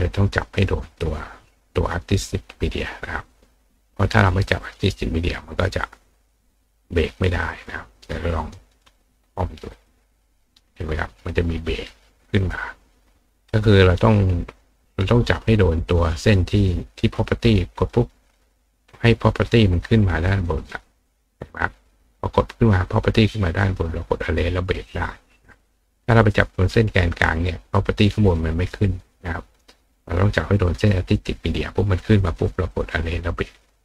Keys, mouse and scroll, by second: 0.4 click, 2.6 click, 4.6 click, 7.0 click, 7.6 click, 7.9 click, 9.7 click, 13.4 click, 13.8 click, 14.7 click, 17.0 click, 17.9 click, 18.9 click, 19.8 click, 20.4 click, 23.6 click, 24.8 click, 25.6 click, 26.5 click, 30.0 click, 30.9 click, 32.7 click, 33.6 click.